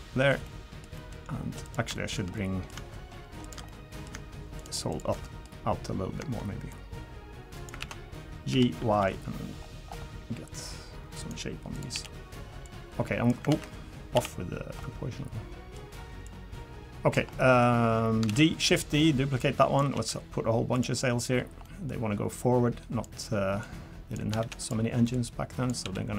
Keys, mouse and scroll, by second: 0.4 middle click, 0.9 middle click, 1.6 click, 2.3 middle click, 3.4 shift+click, 3.7 middle click, 4.6 shift+click, 5.2 middle click, 6.7 click, 7.8 ctrl+z, 8.5 g, 11.7 click, 11.9 l, 12.6 click, 13.5 ctrl+z, 14.1 o, 14.8 middle click, 16.2 click, 17.3 middle click, 18.3 shift+d, 19.4 click, 19.9 s, 21.6 middle click, 22.4 click, 23.6 click, 24.4 shift+d, 25.1 click, 25.8 s.